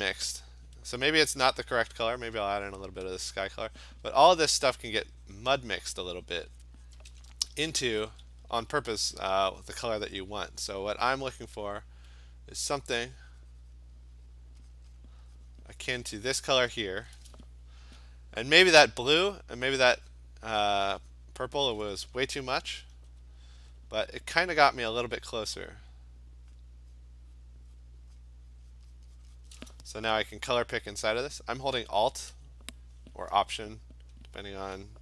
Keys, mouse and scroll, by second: 1.4 alt+click, 1.6 alt+click, 2.1 click, 3.4 alt+click, 3.9 click, 4.2 click, 4.2 alt+click, 4.7 alt+click, 5.1 click, 5.9 click, 6.1 click, 6.4 click, 6.6 alt+click, 6.7 click, 6.9 click, 7.1 alt+click, 7.9 [, 8.1 [, 9.6 click, 9.9 click, 10.4 click, 10.9 [, 13.8 click, 14.5 click, 14.8 click, 15.0 click, 15.8 click, 16.6 click, 18.8 alt+click, 19.9 click, 20.1 click, 20.9 click, 21.2 click, 23.0 ], 23.6 ], 24.5 click, 25.0 [, 25.6 click, 26.6 click, 27.0 click, 27.5 click, 27.9 click, 28.2 click, 28.6 click, 28.8 click, 29.0 click, 29.3 click, 29.5 click, 31.1 alt+click.